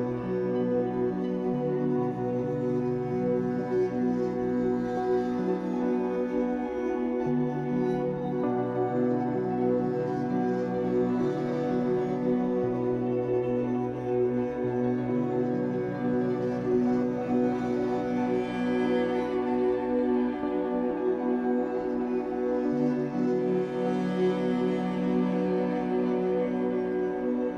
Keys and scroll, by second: 4.7 Escape, 5.8 3, 10.6 v, 12.0 ctrl+z, 13.0 b, 15.8 r, 17.3 alt+x, 21.0 Escape, 21.2 3, 24.8 Escape, 25.2 3, 26.1 shift+Caps_Lock, 26.2 shift+Tab, 26.9 Escape.